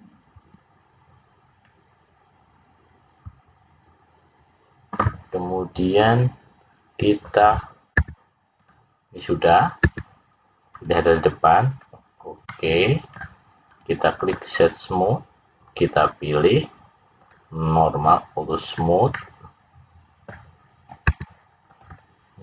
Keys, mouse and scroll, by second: 7.9 `, 9.7 `, 12.4 middle click, 13.6 right click, 15.9 click, 17.1 click, 18.0 click, 18.7 click, 19.1 middle click.